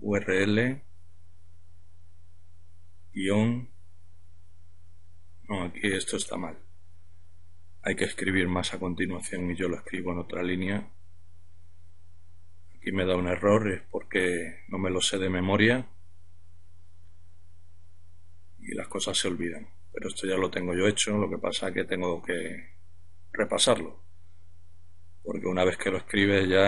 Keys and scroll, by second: 1.1-2.0 typing, 8.4 Up, 9.1 Left, 9.6 Left, 9.7 Left, 9.8-10.6 typing, 12.8 typing, 15.0 typing, 16.7-20.1 typing.